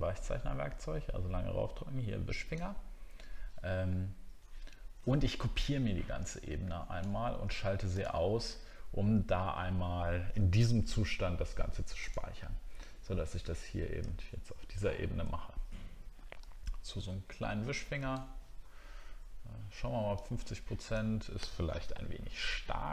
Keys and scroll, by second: 14.1-14.5 alt+scroll up 1, 14.7 alt+scroll up 1, 21.8 ctrl+z.